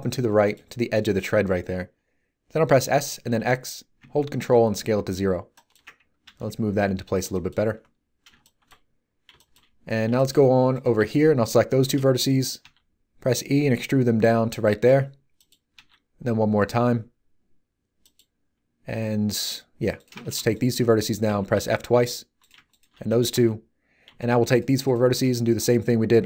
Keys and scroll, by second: 2.6 s, 3.2 x, 6.2 g, 12.6 e, 15.7 e, 21.2 f.